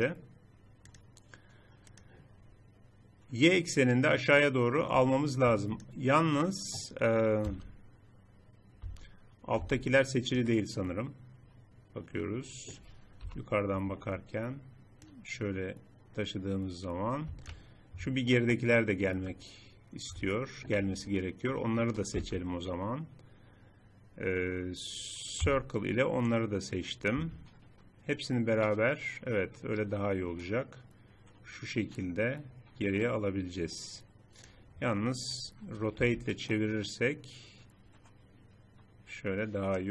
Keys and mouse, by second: 0.9 typing, 2.2 click, 2.2 typing, 3.6-5.2 drag, 5.2 middle click, 7.5 z, 8.9 z, 9.6 z, 13.3 KP_7, 18.4-21.1 middle drag, 22.2 z, 25.6 c, 28.2-30.0 drag, 36.0 r.